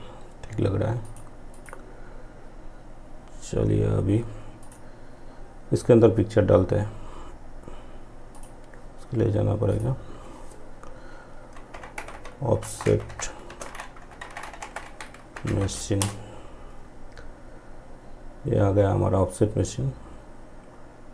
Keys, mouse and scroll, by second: 0.1 click, 3.6 click, 7.4 click, 10.8 o, 12.5-14.6 typing, 15.0 Return.